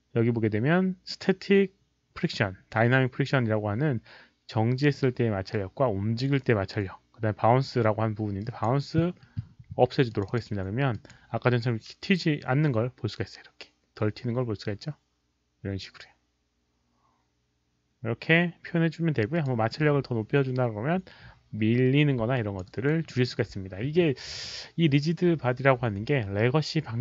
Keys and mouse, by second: 1.8 click, 8.4 drag, 10.1 click, 10.2 click, 10.9 click, 19.3 click, 21.0 click, 22.3 alt+click, 22.7 alt+right click, 23.0 alt+middle click, 23.2 alt+click, 23.5 alt+click.